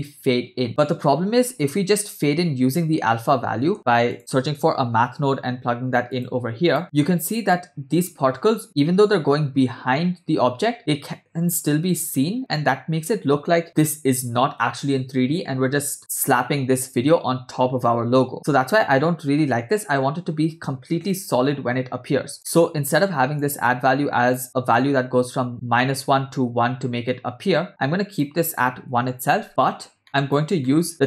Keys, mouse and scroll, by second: 0.8 middle click, 1.1-1.7 scroll up 2, 1.7-3.7 scroll up 1, 3.7 scroll up 1, 3.7 shift+a, 7.2-8.6 scroll up 5, 8.6-10.2 scroll up 1, 15.4-17.9 scroll down 3, 17.9 scroll down 2, 18.3-18.8 scroll up 3, 19.3-19.7 scroll up 3, 22.3 click, 22.3 scroll down 2, 22.5 middle click, 23.0 click, 23.7 middle click, 24.8-28.3 drag, 28.5-29.5 drag, 29.9 scroll down 2, 30.0 middle click, 30.1 click, 30.7 middle click, 30.9-31.0 scroll down 1.